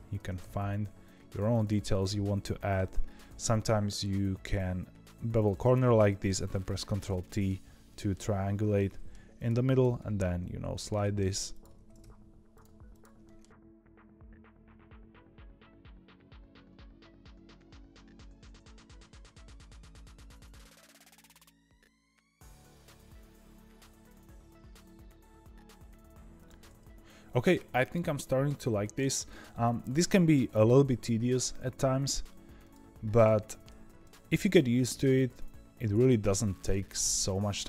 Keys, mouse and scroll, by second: 0.1 ctrl+b, 1.8 click, 2.7 ctrl+b, 5.8 middle click, 6.7 ctrl+t, 7.1-9.3 middle drag, 9.3 click, 9.7 g, 10.9 middle click, 11.4 click, 11.7 ctrl+b, 12.8 click, 13.2 middle click, 13.5 ctrl+b, 14.6 click, 14.7 ctrl+b, 15.1 click, 15.2 g, 15.7 middle click, 16.2 click, 16.3 ctrl+b, 16.7 click, 16.9 g, 17.3 ctrl+z, 17.3 ctrl+z, 17.7 ctrl+b, 18.4 click, 18.6 g, 19.1 click, 19.1 ctrl+b, 19.6 click, 19.7 ctrl+b, 20.6 click, 20.7 ctrl+b, 21.1 click, 21.2 ctrl+b, 21.7 middle click, 21.9 2, 22.0 click, 22.2 ctrl+b, 22.6 1, 22.7 click, 22.7 g, 23.2 click, 23.3 ctrl+b, 23.8 click, 23.9 ctrl+b, 24.4 click, 24.6 ctrl+b, 25.0 click, 25.0 g, 25.5 click, 25.6 ctrl+b, 27.8-29.6 middle drag, 29.6 2, 29.7 click, 30.4 ctrl+b, 32.8 1, 33.1 click, 33.4 g, 34.7 click, 35.0 ctrl+b, 36.4 click, 36.7 g.